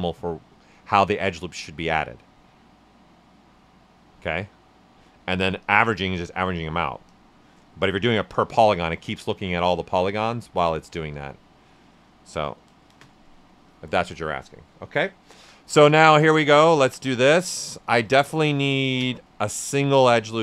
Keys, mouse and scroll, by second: 2.9 space, 5.5 click, 7.1 space, 14.5 alt+right click, 15.3 shift+f, 15.5 right click, 16.7 shift+d, 17.0 right click, 18.9 space.